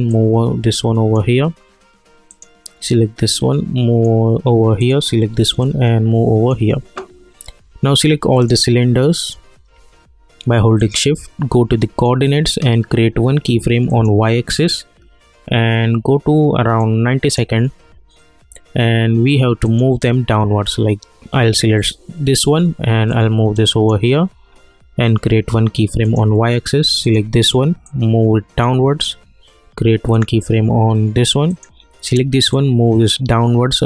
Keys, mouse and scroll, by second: 10.8 shift+click, 12.0 click, 16.8-19.6 drag, 19.7 click, 23.1-33.8 drag.